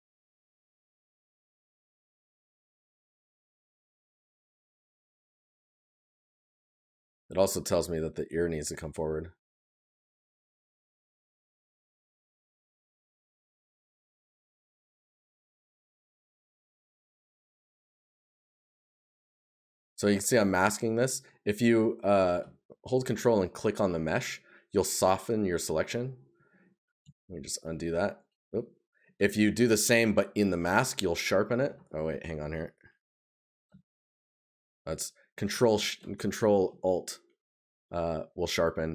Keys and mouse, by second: 6.3 right click, 8.2 right click.